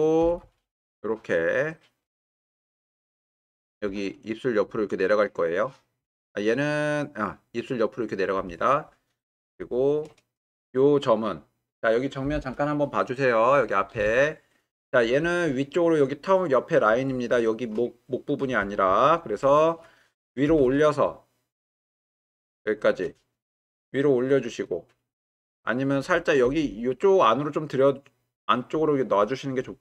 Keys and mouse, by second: 0.2 g, 0.4 y, 9.5-10.0 shift+middle drag, 20.5 g, 20.6 z, 22.6 shift+click, 26.4 g.